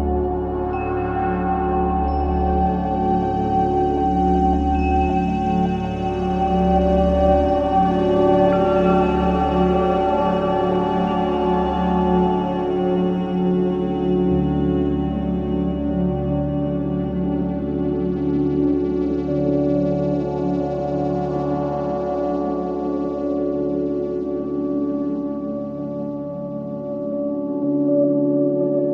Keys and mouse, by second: 5.8 click, 6.9 typing, 7.6 Return, 8.8 click, 10.5-11.3 drag, 11.6 click, 13.5 g, 13.8 z, 14.5 click, 15.8-18.7 drag, 17.2 typing, 19.6 typing, 20.9 click, 21.9-22.2 typing, 22.6 click, 23.4-24.5 drag, 24.0-28.6 typing.